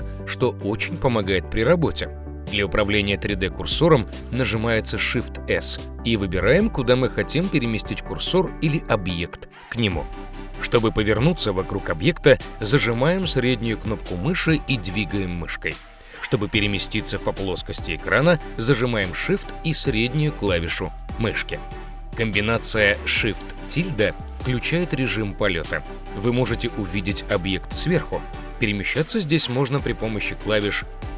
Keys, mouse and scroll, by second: 0.8 g, 5.1 shift+s, 9.8 shift+middle click, 11.0 shift+s, 13.4 click, 15.4 shift+`, 20.2-22.0 shift+middle drag, 23.8 shift+`, 31.0 w.